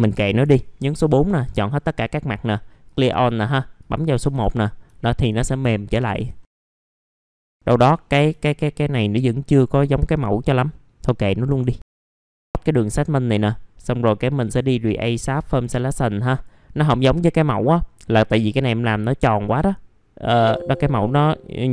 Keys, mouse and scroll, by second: 0.8 middle click, 1.3-2.1 scroll down 1, 2.8 click, 4.9 alt+middle click, 5.7 alt+middle click, 6.4 scroll down 1, 6.6 scroll up 1, 7.1 middle click, 7.5 scroll down 1, 7.6 middle click, 8.1 scroll down 1, 8.4 alt+middle click, 9.6-10.7 scroll up 1, 10.7 middle click, 11.0-11.6 scroll up 2, 11.9 click, 12.1 F4, 12.3-15.2 drag, 15.2-16.3 scroll up 1, 16.3 click, 20.2 middle click.